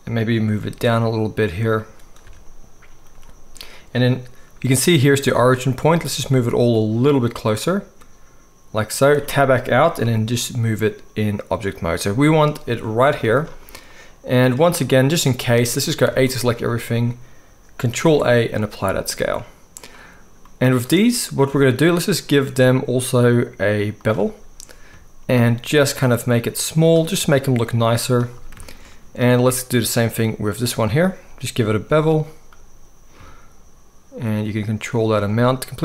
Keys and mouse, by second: 0.7 g, 2.2 a, 5.9 g, 9.2 Tab, 10.0-12.4 middle drag, 10.0 g, 13.1-14.5 middle drag, 13.1 z, 16.0 a, 16.2-19.7 middle drag, 18.0 ctrl+a, 19.7 click, 19.8-22.0 middle drag, 22.0-29.4 drag, 29.4 middle click, 30.0-35.8 drag.